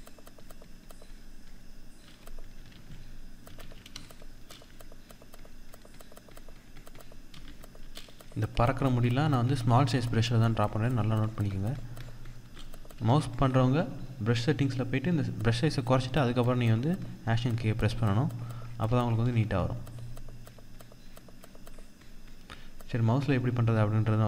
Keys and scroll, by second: 2.2 ctrl+z, 12.4 ctrl+=, 12.6 ctrl+space.